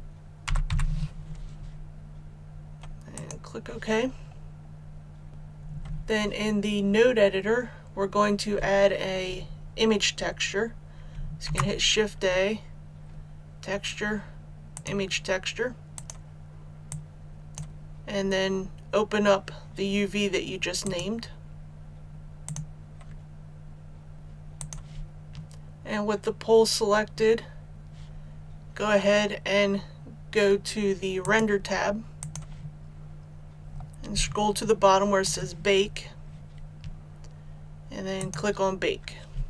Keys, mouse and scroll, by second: 0.0-0.7 typing, 3.1 click, 4.0-11.1 scroll down 1, 11.4 shift+a, 14.7-18.3 drag, 24.1 scroll down 1, 24.5 click, 33.5-34.2 scroll down 1, 35.2 click, 35.7-38.1 scroll down 1, 38.1-39.4 drag.